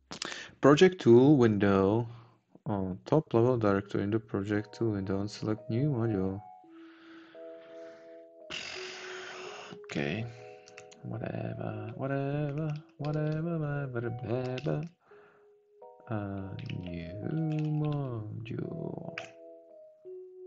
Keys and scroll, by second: 10.8 Up, 13.0 Down, 15.0 ctrl+shift+a.